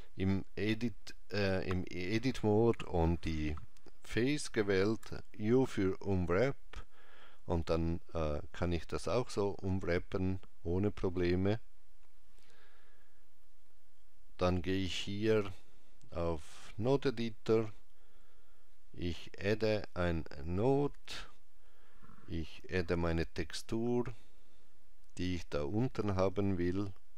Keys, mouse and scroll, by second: 4.9 u, 11.1 middle click, 15.4 click, 19.8 click, 22.8 shift+a.